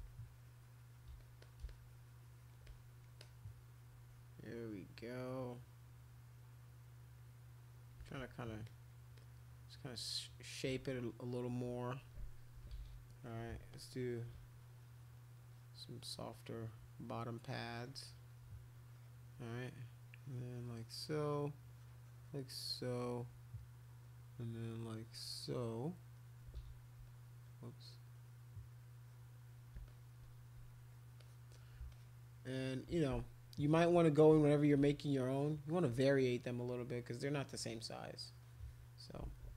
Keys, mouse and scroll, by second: 0.0 shift+click, 1.2 alt+click, 1.4 alt+click, 1.6 shift+click, 2.6 click, 3.2-7.9 drag, 8.0 alt+click, 8.6 click, 9.1-10.1 drag, 12.6 [, 12.7 [, 12.9 [, 13.7 click, 14.3 click, 14.5 click, 14.7 click, 14.9 click, 15.5 click, 16.0 click, 17.3 click, 18.2 click, 18.7 click, 20.1 click, 21.0 click, 21.7 click, 22.7 click, 22.9 click, 24.6-25.8 drag, 26.6 ctrl+z, 27.0 click, 29.0 click, 29.8 alt+click, 31.2 alt+click, 31.9 alt+click, 32.5 alt+click, 33.8 [, 33.9 [, 34.3 ], 34.8 ], 35.6-37.0 drag, 38.0 click, 38.2 click, 38.4 click.